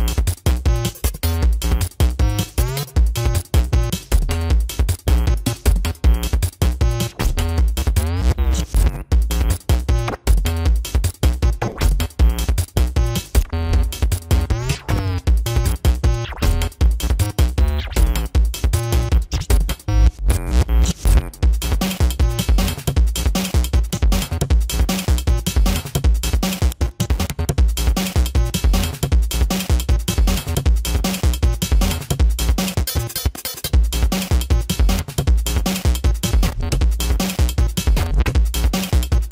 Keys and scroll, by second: 0.7 space, 1.9 space, 2.6 space, 3.5 space, 5.3 space, 6.9 ctrl+alt+z, 8.3 space, 16.4 space, 17.4 space, 19.8 ctrl+=.